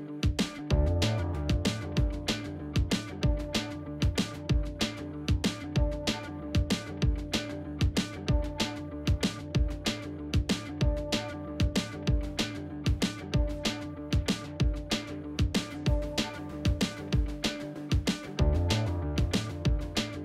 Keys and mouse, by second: 0.0 alt+z, 0.1 middle click, 0.7 g, 2.5 alt+z, 3.1 middle click, 3.5 shift+middle click, 4.5 alt+z, 4.7 click, 4.9 alt+z, 5.4 shift+click, 5.6 middle click, 6.7 middle click, 7.1 shift+click, 7.3 alt+z, 7.6 middle click, 9.4 alt+z, 10.0 ctrl+z, 11.6 alt+z, 11.7 middle click, 14.3 alt+z, 14.7 middle click, 16.1-17.1 middle drag, 17.5 click, 19.3 middle click, 19.7 alt+z, 19.8 middle click.